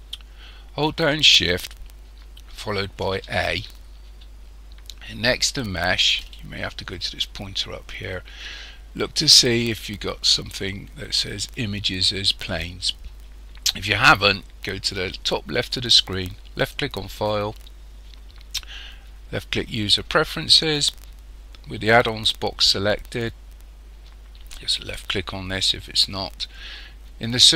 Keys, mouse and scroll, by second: 3.0 shift+a, 16.6 click.